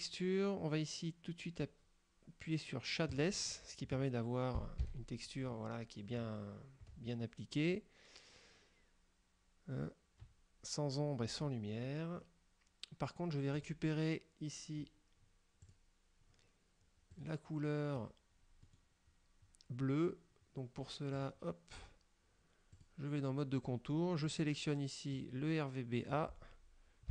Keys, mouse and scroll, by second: 3.2 click, 4.9 F12, 6.3 scroll up 2, 13.6 click, 15.7 click, 18.7 click, 21.2 click, 22.8 click, 24.4 click, 25.3-26.4 drag.